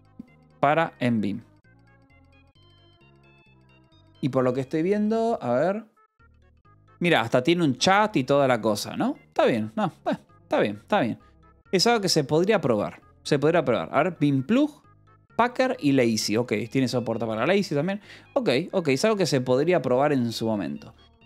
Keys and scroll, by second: 9.3 j, 10.6 k, 11.2 j, 11.8 k, 13.7 j, 15.9 j, 17.7-21.2 typing.